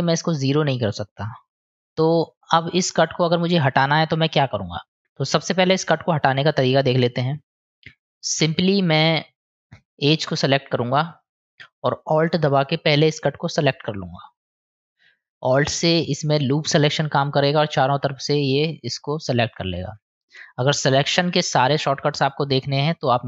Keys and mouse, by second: 0.0 click, 0.2 click, 0.4 click, 0.6 click, 0.7 click, 0.9 click, 1.0 click, 1.2 click, 1.3 click, 1.5 click, 1.7 click, 1.9 click, 7.1 click, 8.0 click, 8.6 click, 14.8-19.6 middle drag, 20.8-21.8 middle drag.